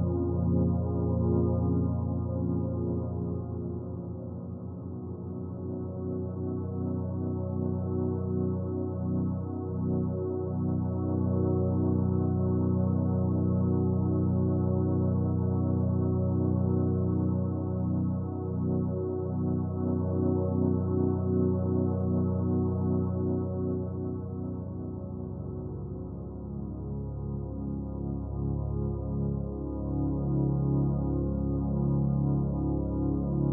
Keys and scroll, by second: 6.1 ctrl+z.